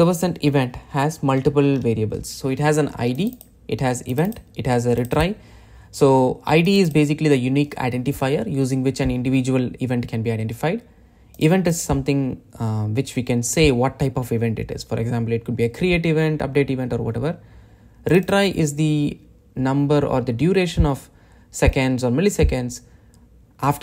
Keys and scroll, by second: 1.1 super+b.